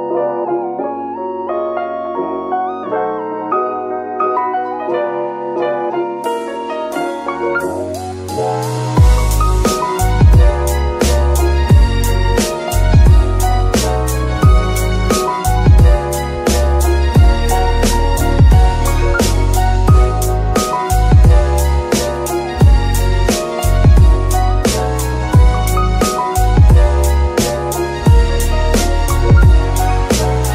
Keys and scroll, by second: 12.0-13.2 typing, 14.4-17.5 typing, 17.7 Return, 19.2 g, 19.7 Tab, 20.1 s, 20.8 Tab, 21.0 s, 23.2 KP_7, 25.4 KP_Decimal, 27.4 KP_3, 29.5 g.